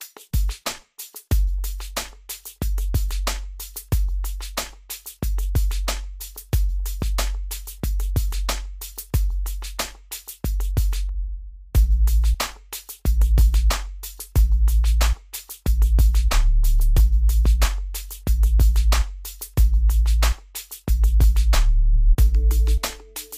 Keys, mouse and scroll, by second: 2.1 click, 3.9-5.7 middle drag, 5.7-14.7 drag, 14.7 scroll down 1, 15.4-15.8 scroll up 1, 16.5 middle click, 17.4 scroll down 1, 18.9 scroll up 1, 19.7 click, 23.3 click.